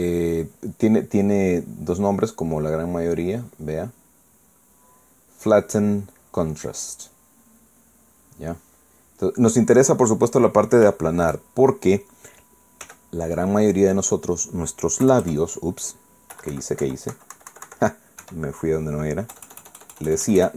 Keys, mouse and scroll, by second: 3.0 click, 4.1-9.5 drag, 10.2 middle click, 11.2 middle click, 12.0 shift+middle click, 13.8 f, 14.5 click, 15.2 middle click, 16.0 KP_Add, 17.3 KP_Subtract, 19.2 KP_1, 20.3 KP_Add.